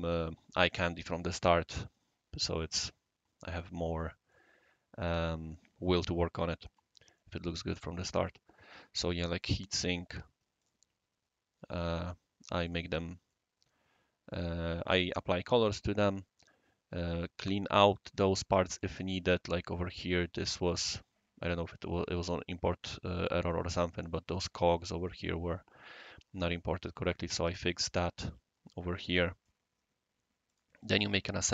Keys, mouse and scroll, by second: 3.3 scroll up 1, 3.9 scroll up 1, 3.9 scroll down 1, 4.0 scroll up 1, 4.1 scroll down 2, 7.1-8.0 right drag, 9.4 right click, 10.6 click, 12.6 click, 13.3-14.3 right drag, 15.4-18.8 right drag, 19.1 scroll down 1, 19.1-23.5 scroll up 1, 23.5-24.1 right drag, 26.7 scroll down 1, 26.8 scroll up 1, 27.0 scroll down 1, 28.9-29.4 right drag, 30.4 click.